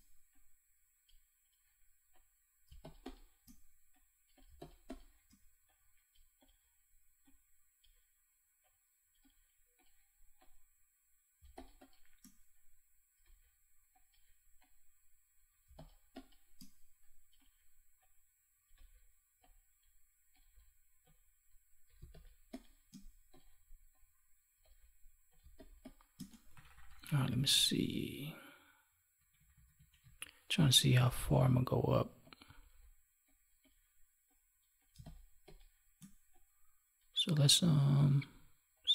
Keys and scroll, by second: 2.6 space, 11.3 space, 15.6 space, 21.9 space, 25.3 space, 29.1 ctrl+=, 34.9 space.